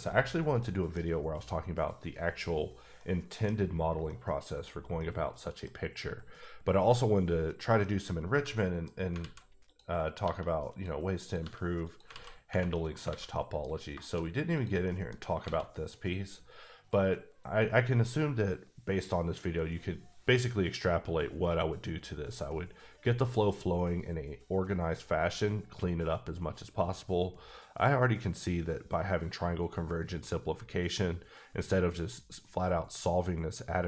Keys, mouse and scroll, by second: 0.9 middle click, 1.0 scroll up 1, 2.3-2.9 scroll up 1, 3.0 middle click, 3.7-4.1 scroll down 1, 4.1 middle click, 5.0 middle click, 7.5 click, 7.8 middle click, 8.1 scroll up 2, 8.5 middle click, 9.0 scroll up 1, 9.2 alt+z, 9.7 click, 10.2 g, 10.7 click, 11.2 click, 11.4 g, 11.8 click, 12.1 z, 12.3 scroll down 1, 12.7 middle click, 13.1 alt+a, 13.3 middle click, 13.7-14.3 scroll up 4, 14.0 shift+middle click, 14.5 click, 14.8 middle click, 15.4 alt+a, 27.1 a, 27.3 scroll up 3, 27.8 scroll down 1.